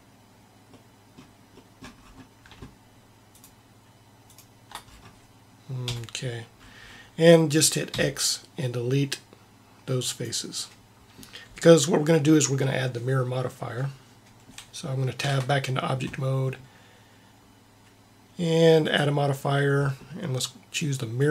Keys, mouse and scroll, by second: 5.8 KP_1, 8.0 x, 9.0 x, 15.2 Tab, 18.8-20.6 drag.